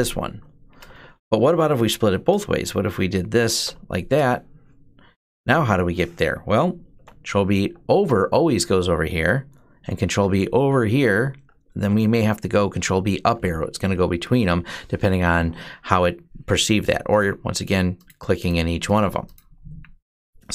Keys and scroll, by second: 0.0-3.9 typing, 6.6 ctrl+b, 7.3 Right, 9.7 ctrl+b, 10.2 Left, 11.4 ctrl+b, 11.7 Up.